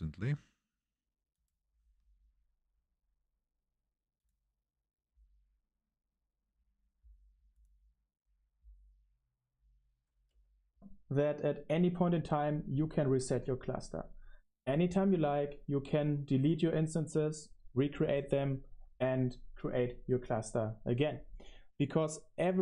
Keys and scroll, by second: 10.6 space.